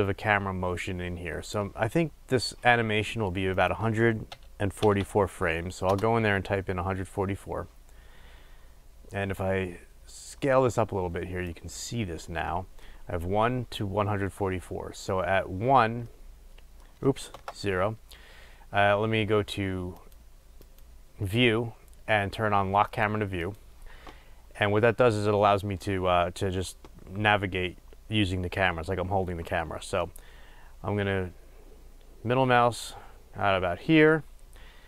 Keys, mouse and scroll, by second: 10.5-15.4 drag, 15.4-23.5 middle drag, 17.4 KP_0, 23.5 click, 30.2-34.8 middle drag.